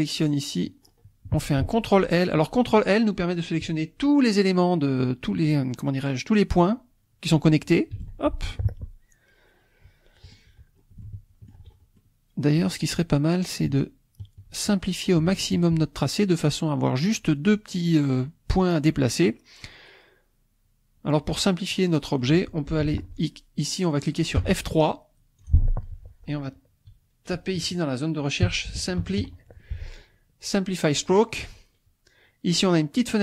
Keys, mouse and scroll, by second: 0.0 middle click, 8.1 ctrl+l, 8.7-10.5 ctrl+drag, 10.7 scroll up 2, 11.0 shift+click, 11.6 shift+scroll down 2, 11.7 shift+scroll up 2, 12.0 shift+click, 13.7 shift+click, 15.3 shift+click, 18.6 scroll down 2, 19.2-22.4 drag, 24.4 F3, 25.4-28.4 drag, 28.4-29.2 typing, 31.0 click, 33.0 click.